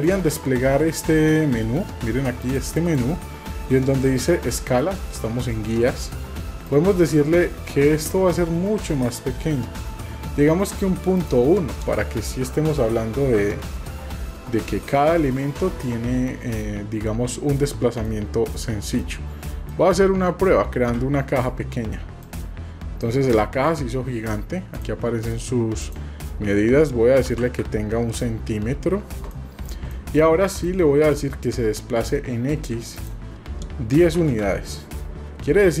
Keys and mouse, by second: 2.8-13.6 drag, 14.9 middle click, 15.9-16.3 shift+middle drag, 18.0 middle click, 19.0-19.7 shift+middle drag, 23.0-23.6 middle drag, 25.8-27.6 drag, 29.4-29.7 drag, 30.0 shift+click, 30.6 click, 35.7 shift+click.